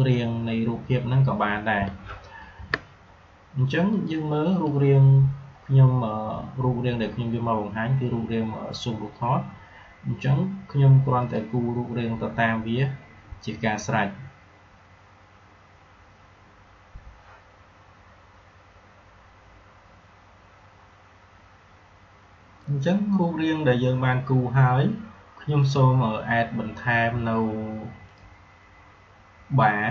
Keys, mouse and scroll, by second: 2.3 g, 3.9 click, 11.1 click, 22.5 click, 22.7 click, 25.6 click.